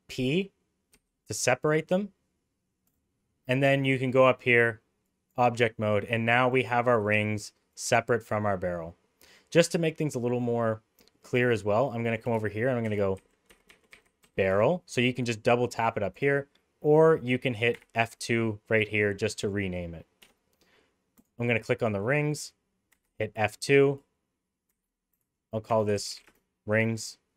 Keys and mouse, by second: 0.9 p, 4.4 click, 8.2 click, 11.5-15.1 drag, 13.7 r, 15.6 click, 15.8 click, 17.7 F2, 22.9 F2.